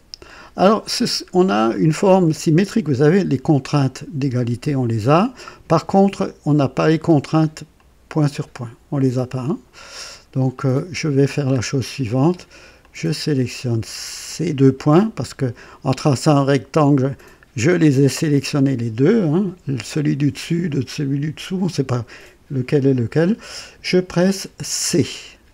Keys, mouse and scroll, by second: 1.2 scroll up 2, 1.7-2.4 right drag, 7.7-9.8 drag, 10.5 click, 11.5 scroll up 1, 12.8-13.5 drag, 24.9 c.